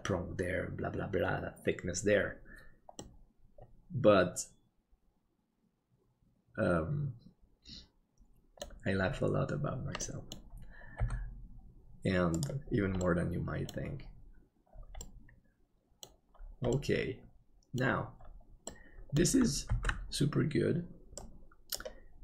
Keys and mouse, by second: 3.0-8.7 middle drag, 10.1 middle click, 11.0 g, 13.1 middle click, 15.1-16.1 middle drag, 16.8-17.8 middle drag, 18.7 middle click, 19.9 ctrl+s.